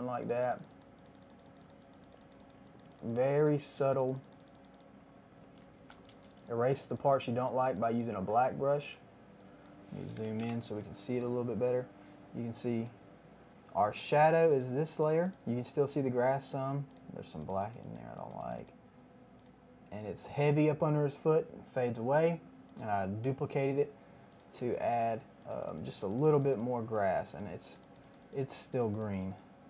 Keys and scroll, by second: 5.5 [, 5.7 [, 5.9 [, 6.1 [, 10.1 KP_1, 10.1 KP_0, 10.3 KP_0, 10.3 Return.